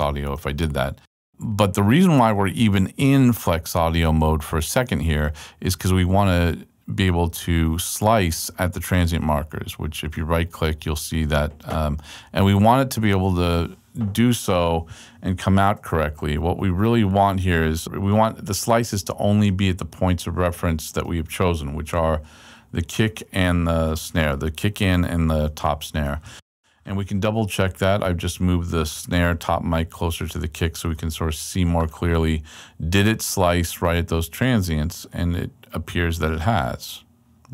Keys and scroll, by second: 16.2 super+Right, 23.7 super+Left, 29.7 super+Right.